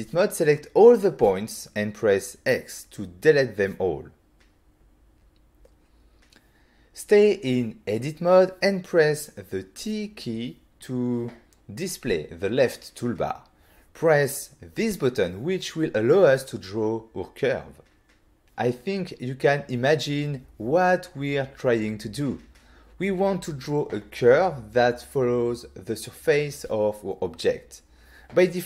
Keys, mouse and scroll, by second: 0.6 middle click, 1.0 click, 1.4 middle click, 1.6 middle click, 1.9 z, 2.1 middle click, 2.4 Tab, 2.6 middle click, 3.0 middle click, 3.4 x, 4.0 click, 4.9 middle click, 5.6 middle click, 5.8 z, 6.3 shift+middle click, 9.0 t, 15.0 click, 16.1 click.